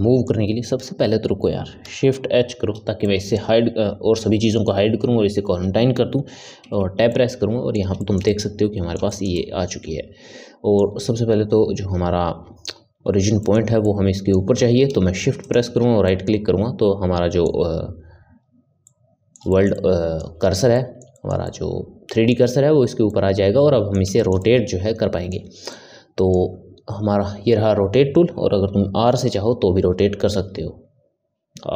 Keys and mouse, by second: 0.8 Tab, 2.5 shift+h, 3.0-6.2 middle drag, 6.6 Tab, 7.0-12.3 middle drag, 13.4-15.4 ctrl+middle drag, 15.4 shift+right click, 16.0-28.8 middle drag, 29.8 r.